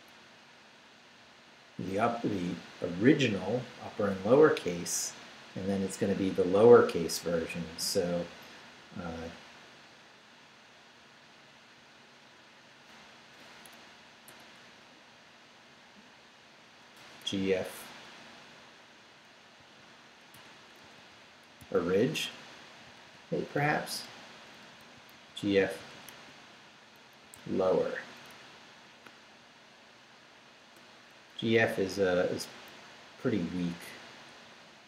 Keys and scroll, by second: 14.3 BackSpace, 16.4 BackSpace, 19.6-22.1 typing, 22.8 Right, 24.1 Return, 24.5-27.8 typing, 31.5 Up, 31.7 Left.